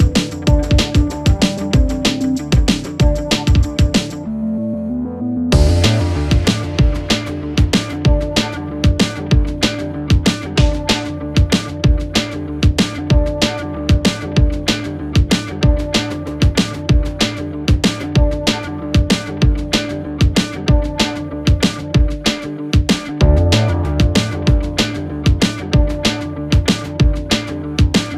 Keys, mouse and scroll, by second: 6.5 click, 10.0 click, 17.7 click, 20.2-20.9 click, 24.0 click, 25.0 Return, 26.5-27.2 click.